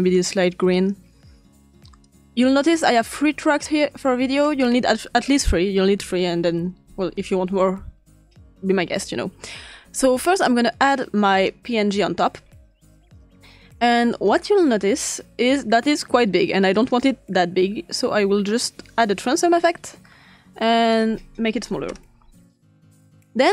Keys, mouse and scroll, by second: 0.7 click, 2.0-3.0 drag, 3.4 drag, 4.6-6.2 ctrl+scroll up 2, 6.2-7.4 ctrl+scroll down 2, 10.0-11.5 drag, 14.2-14.6 drag, 14.7 click, 15.6 click, 16.8 click, 18.0-20.1 drag, 20.6-21.9 drag, 21.4-22.1 typing.